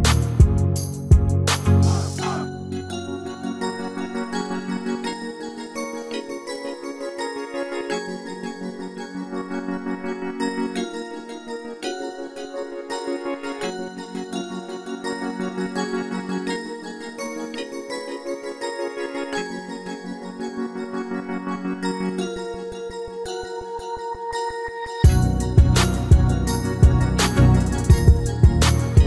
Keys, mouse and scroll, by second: 1.0 Tab, 2.4 right click, 3.6 Tab, 4.2 click, 4.6 click, 5.0 Tab, 5.5 click, 6.6 Tab, 7.3 right click, 7.8 ctrl+l, 10.9 Tab, 11.1 Tab, 12.8 click, 13.6 middle click, 13.6-14.2 scroll up 1, 15.0 click, 15.9 click, 18.3 click, 18.7 middle click, 19.5 click, 23.6 space.